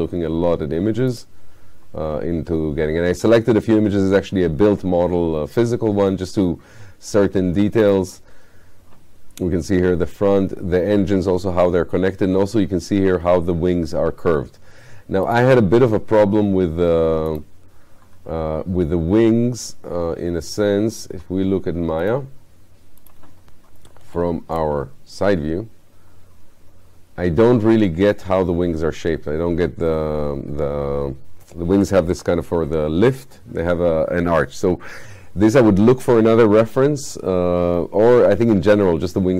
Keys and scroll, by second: 24.1 space.